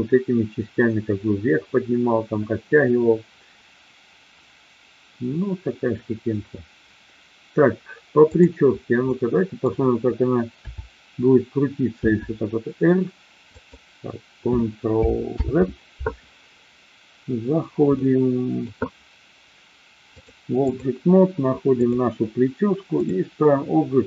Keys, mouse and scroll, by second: 8.2 click, 9.1-9.7 middle drag, 10.6 KP_7, 12.1 r, 13.4 click, 15.3 ctrl+z, 17.9-18.6 middle drag, 20.1-20.8 drag, 21.8 click, 22.9-24.0 drag.